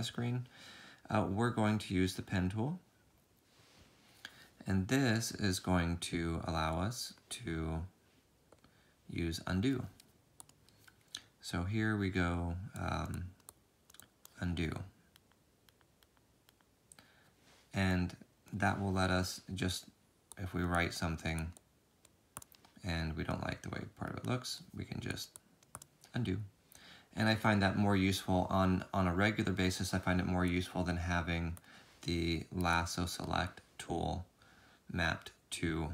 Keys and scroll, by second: 2.8 z.